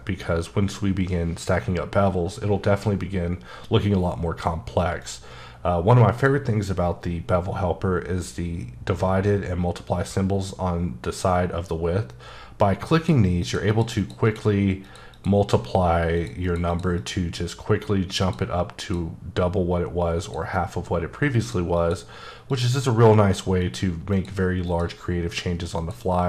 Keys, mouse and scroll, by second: 5.0 click, 12.9 click, 13.4 click, 13.7 double click, 14.3 click, 14.8 click, 15.1 double click, 16.2 click, 16.4 double click, 16.7 click, 16.9 click, 18.2 click, 18.8 click, 20.2 click, 21.4 click, 21.7 click, 22.5 click, 23.6 click, 24.1 click, 24.6 click, 25.8 click.